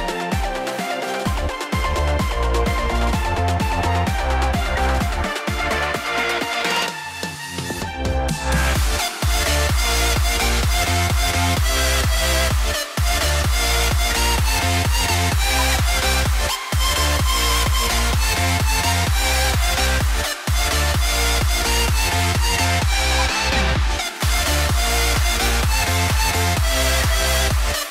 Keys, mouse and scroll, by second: 3.2-3.7 scroll down 1, 3.9 double click, 4.6 F2, 8.1-9.3 scroll down 1, 13.6 double click, 13.9 F2, 15.0 double click, 15.5 ctrl+z, 22.4 space, 24.4 double click, 24.7 scroll down 1, 26.8 F2.